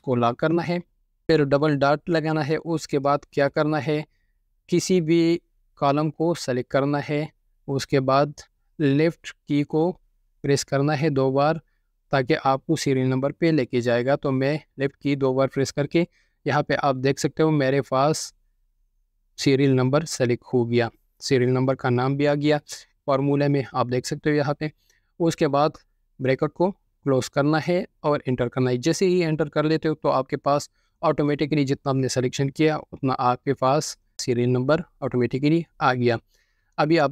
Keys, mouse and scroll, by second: 3.3 typing, 14.6 typing, 15.5 Left, 15.6 click, 24.1 ctrl+click, 29.3 ctrl+click, 29.6 ctrl+4, 31.1 Return.